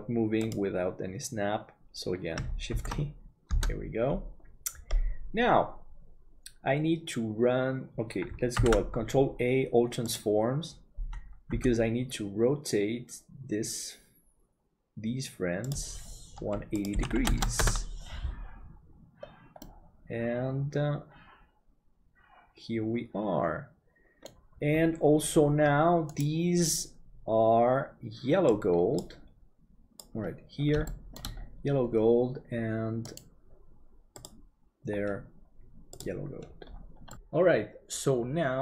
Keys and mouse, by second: 0.0 ctrl+z, 0.4-2.1 drag, 2.9 shift+d, 8.6 ctrl+a, 11.6 r, 19.6-24.4 middle drag, 30.8 shift+middle click.